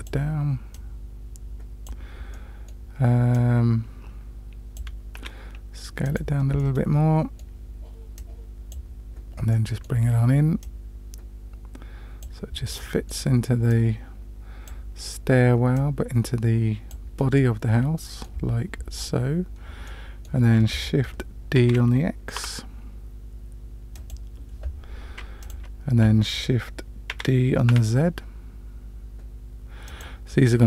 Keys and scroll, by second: 5.2 s, 21.6 shift+d, 27.1 shift+d.